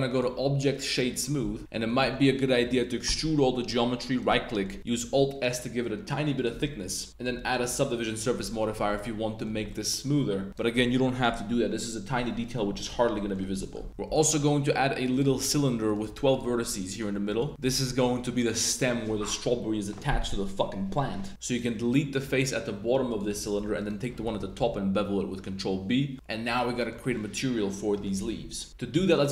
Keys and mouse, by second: 0.2 right click, 1.2 drag, 1.5 Tab, 1.6 super+z, 1.7 click, 3.0 e, 4.2 click, 4.4 click, 5.0 alt+s, 6.3 shift+click, 6.6 Tab, 6.7-7.4 drag, 7.3 super+1, 7.6 super+2, 7.8-8.5 drag, 8.9-9.4 drag, 9.7 drag, 10.0 a, 10.5 right click, 13.1 drag, 13.5 drag, 13.5 middle drag, 13.9 shift+a, 15.9 click, 16.5-17.9 typing, 17.5 click, 18.4 click, 21.3 z, 21.4 click, 21.7 click, 23.6 3, 23.7 right click, 24.5 super+b, 26.1-26.8 middle drag, 26.8 click, 27.1-28.0 middle drag, 28.5 super+s.